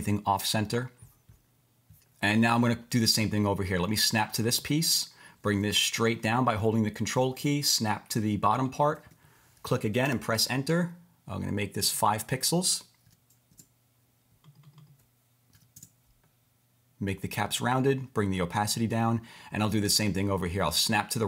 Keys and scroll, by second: 10.0 Return, 13.0 5, 13.5 Return, 15.5 5, 15.8 Return.